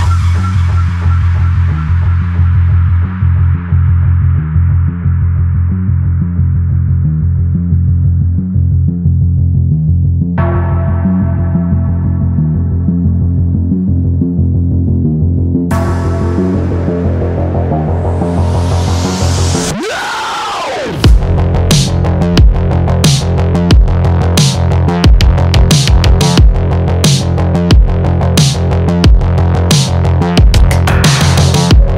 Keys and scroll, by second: 1.8 Return, 15.3 shift+Up, 15.8 shift+Left, 16.3 shift+Down.